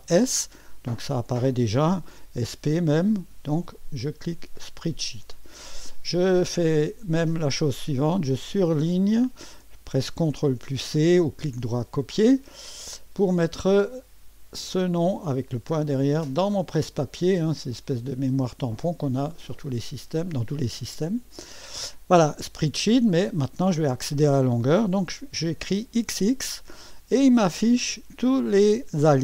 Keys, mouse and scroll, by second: 0.0 s, 2.6 typing, 4.6-7.8 drag, 7.9-9.9 drag, 10.4 ctrl+c, 11.2 click, 12.9 click, 14.7 click, 18.5 click, 21.7 click, 26.0 typing.